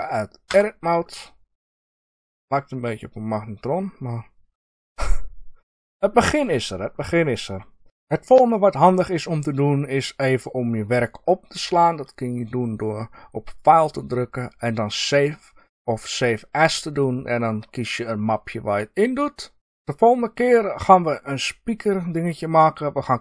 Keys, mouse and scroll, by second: 0.4 Tab, 3.4-3.8 scroll down 2, 6.7-7.8 scroll up 2, 13.5-23.2 drag.